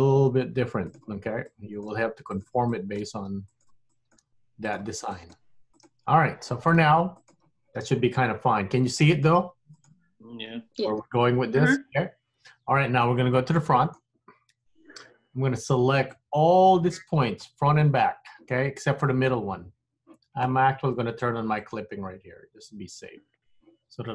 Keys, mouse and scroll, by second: 1.6 click, 2.0 g, 2.9 click, 3.2 g, 4.0 click, 4.3 g, 5.3 click, 5.4 g, 6.6 click, 6.9 g, 9.1 click, 9.4 g, 13.4 middle click, 14.7 KP_1, 16.2 click, 21.7 click.